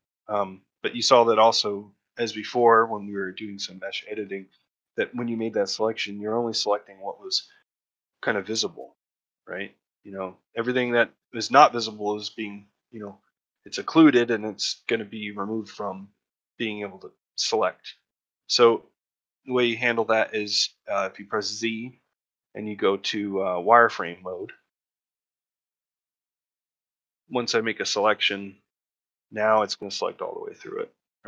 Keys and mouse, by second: 0.2 middle click, 0.6 middle click, 1.1 ctrl+middle click, 6.7 middle click, 8.4-9.4 drag, 9.4 middle click, 13.1 middle click, 13.5 shift+middle click, 18.4 ctrl+middle click, 18.7 middle click, 19.7 shift+middle click, 24.9-26.3 middle drag, 27.1-28.1 drag, 29.2-31.0 middle drag.